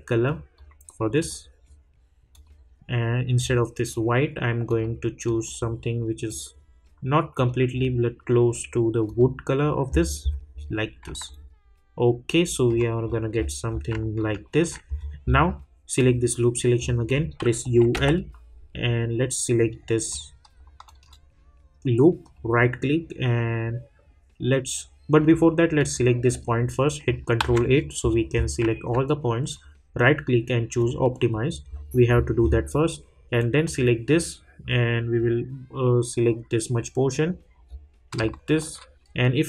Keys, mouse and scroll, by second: 9.6 scroll down 1, 11.3-13.0 alt+drag, 13.0-13.6 scroll up 2, 14.2 alt+middle click, 14.9 scroll up 1, 16.0 click, 16.7 scroll up 1, 17.6 typing, 20.1 click, 20.8 shift+click, 22.3 right click, 25.7 click, 27.4 ctrl+a, 27.7 scroll down 1, 29.5 right click, 30.8 click, 31.7 scroll up 1, 33.6 click, 37.6 scroll up 1.